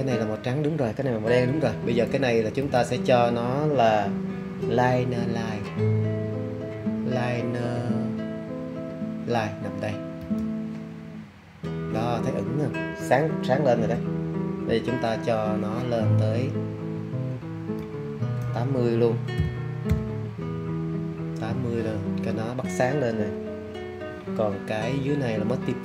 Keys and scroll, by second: 19.3 8, 19.8 0.